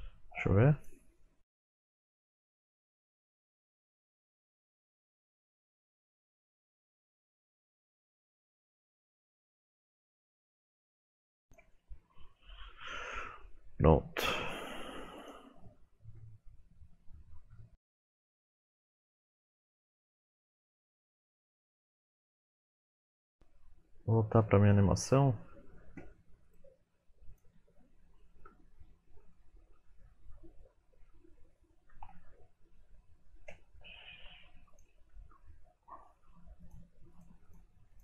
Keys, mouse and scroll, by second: 22.3 click, 22.3 scroll down 2, 28.2 shift+middle click, 28.5-29.4 scroll up 6, 29.3 middle click, 31.8 ctrl+Tab, 32.4 middle click, 34.7 shift+click, 35.3-36.7 scroll down 7, 36.7 shift+click, 36.7-37.2 scroll down 1, 37.2 shift+click.